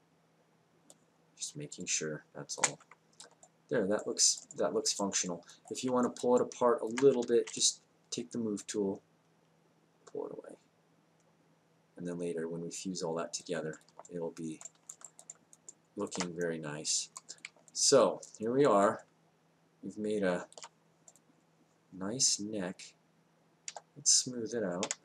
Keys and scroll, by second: 0.8 r, 1.5 space, 7.1 w, 23.7 3.